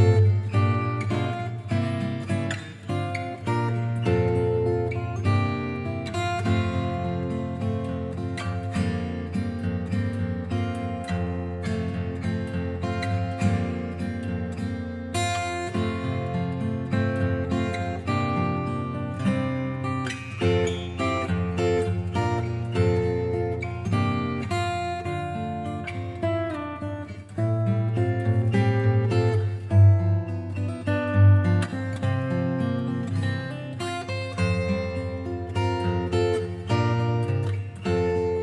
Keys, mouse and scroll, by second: 1.7 click, 3.6 click, 4.9 click, 6.6 Return, 8.8 click, 11.5 click, 14.7 alt+shift+click, 16.8 alt+shift+click, 18.1 alt+shift+click, 22.7 click, 23.0 scroll up 1, 23.0-24.0 scroll down 3, 24.0 scroll up 3, 24.1 scroll, 25.0 click, 25.3 scroll, 26.1 click, 26.8 click, 29.4 click, 31.0 click, 33.7 click, 34.2 click, 36.0 click, 36.6 click.